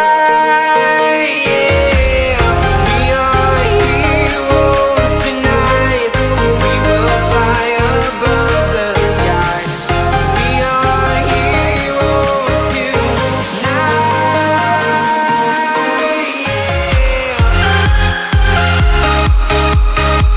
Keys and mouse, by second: 0.5-1.5 drag, 0.9 KP_0, 1.7 click, 1.9-3.5 middle drag, 3.5 click, 3.8-4.9 drag, 5.0 ctrl+z, 5.1 ctrl+z, 5.3 ctrl+z, 5.5 ctrl+z, 6.9 middle click, 7.9 click, 9.4 middle click, 11.1 ctrl+z, 12.0 middle click, 12.4 click, 12.6 middle click, 15.1 ctrl+m, 19.5 click, 19.9 middle click.